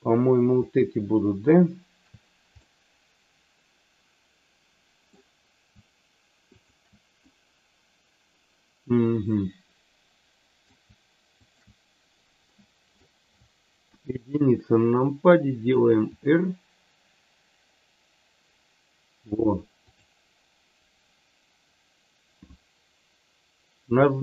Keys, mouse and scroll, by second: 2.5-5.0 middle drag, 6.6 shift+click, 7.1-10.6 middle drag, 11.3 shift+click, 12.4 middle click, 13.9 KP_1, 16.2 r.